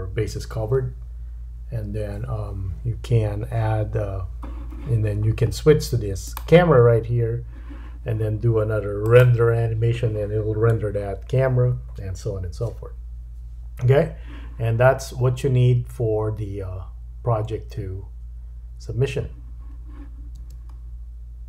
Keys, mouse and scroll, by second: 5.4-6.2 scroll down 1, 6.2 click, 9.0-20.5 drag, 20.5 space.